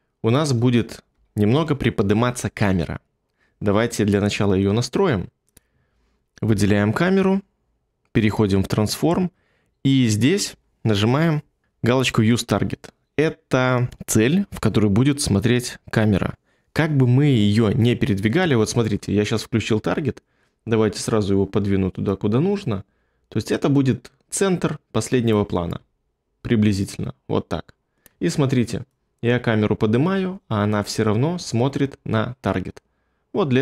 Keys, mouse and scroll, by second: 1.1 1.